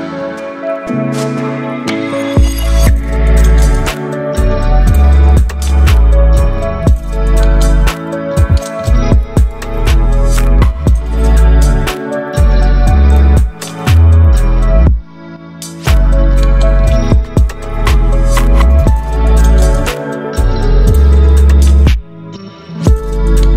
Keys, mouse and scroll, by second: 1.7-3.2 drag, 11.9 ctrl+t, 12.7 right click, 14.2-21.9 drag, 15.3-16.6 drag, 21.9 click.